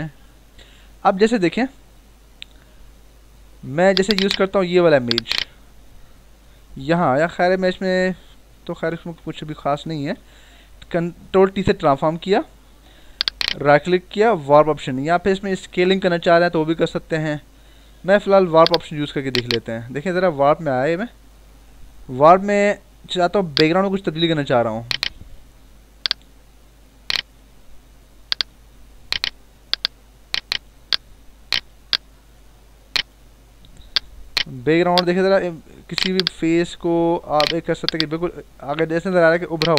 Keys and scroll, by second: 7.6 ctrl+-, 8.1 ctrl+=, 10.0 ctrl+j, 12.3 ctrl+t, 21.8 ctrl+-.